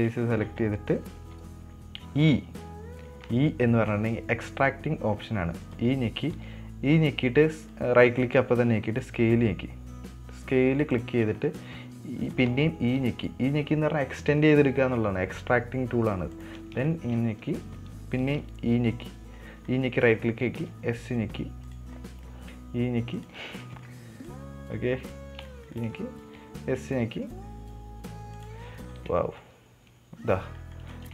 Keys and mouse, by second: 0.6 middle click, 1.2 middle click, 11.6 middle click, 17.3 shift+middle click, 20.1 middle click, 22.3 middle click, 24.1 middle click, 24.7 click, 25.9 shift+middle click, 26.2 shift+middle click, 29.1 middle click, 29.4 Tab, 29.8-31.1 middle drag.